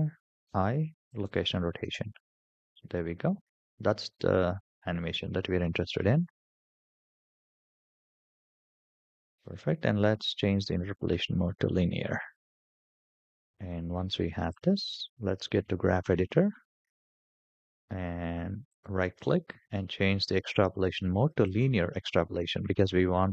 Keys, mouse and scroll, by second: 0.2 i, 1.7 space, 7.5 space, 8.9-10.2 right drag, 11.2 right click, 15.5 click, 18.5-21.4 right drag.